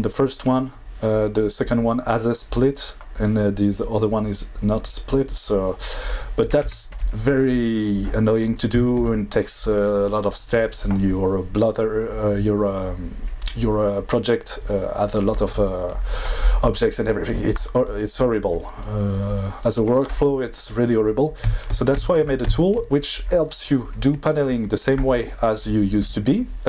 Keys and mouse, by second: 6.6 x.